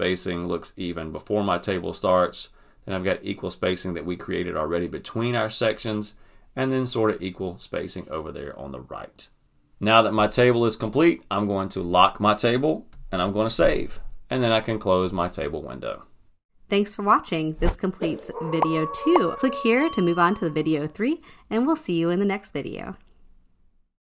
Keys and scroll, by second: 13.2 super+s.